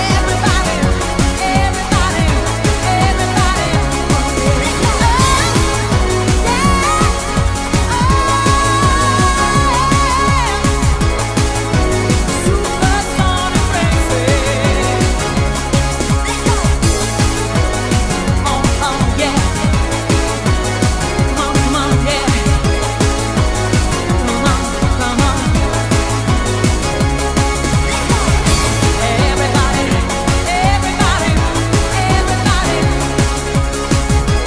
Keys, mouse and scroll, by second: 0.0 middle click, 0.0 scroll down 1, 1.4 click, 3.2-12.3 click, 15.2 middle click, 20.3 right click, 21.8 ctrl+right click, 23.9 ctrl+right click, 25.1 shift+right click, 26.0 right click, 32.9 middle click, 34.0 right click.